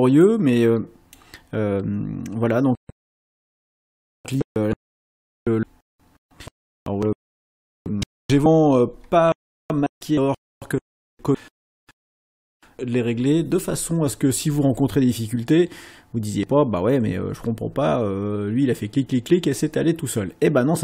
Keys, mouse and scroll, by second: 0.2 click, 3.4 click.